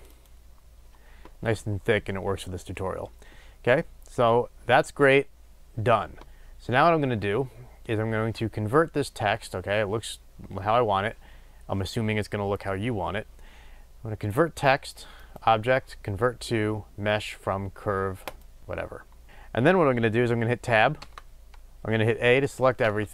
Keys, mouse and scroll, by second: 0.0 click, 18.3-23.1 drag, 20.9 Tab, 22.7 a.